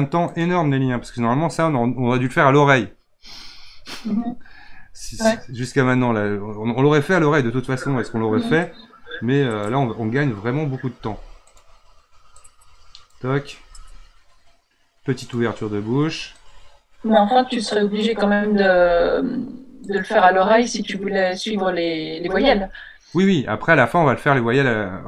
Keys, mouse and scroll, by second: 8.6-10.9 drag, 10.9 r, 12.4 click, 13.7 r, 16.4-18.6 drag, 18.6 r, 20.9-22.1 drag, 22.1 r.